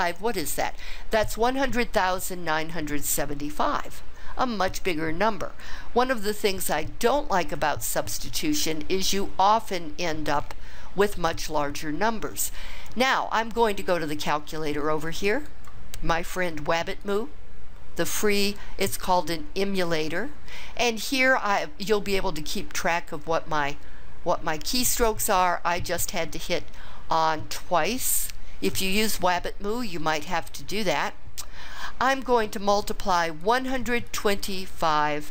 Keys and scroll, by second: 33.5 1, 34.2 2, 34.8 5.